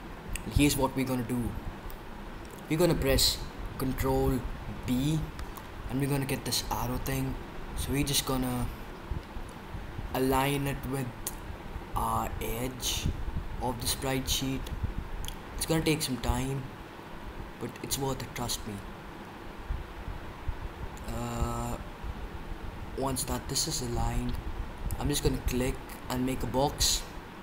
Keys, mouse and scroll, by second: 4.8 ctrl+b.